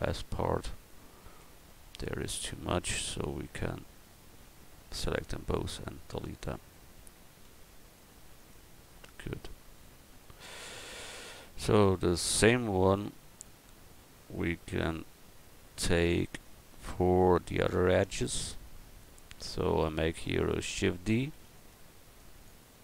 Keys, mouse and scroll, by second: 1.4 Tab, 1.9 a, 3.2 l, 3.6 l, 4.8 x, 7.4 l, 7.9 x, 8.9 Tab, 10.4 a, 11.0 click, 11.2 a, 11.7-18.7 right drag, 21.3 shift+d.